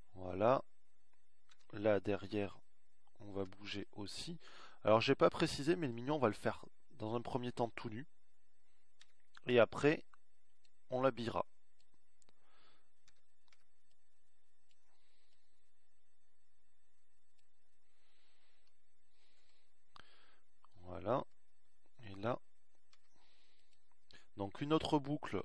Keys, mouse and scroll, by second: 5.3 a, 7.2 b, 12.9 a, 13.4 b, 17.0 a, 17.5 b.